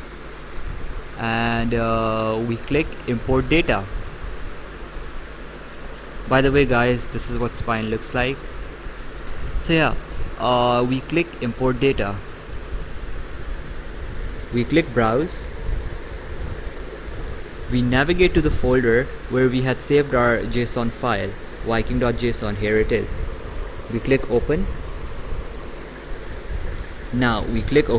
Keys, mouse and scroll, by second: 12.2 click, 16.0 click, 21.9 click, 25.2 click.